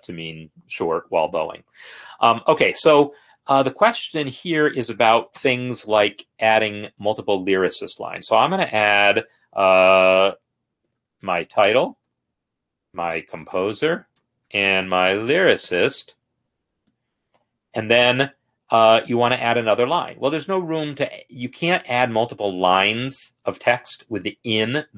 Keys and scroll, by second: 5.6 ctrl+n, 11.1-11.9 typing, 12.2 Tab, 12.8 Tab, 13.0-17.5 typing.